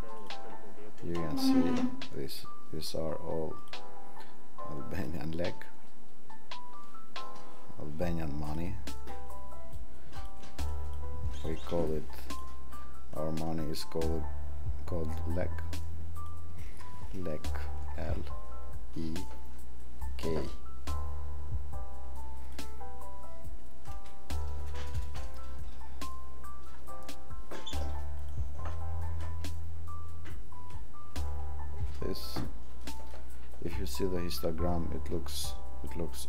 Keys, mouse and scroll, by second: 5.0 click.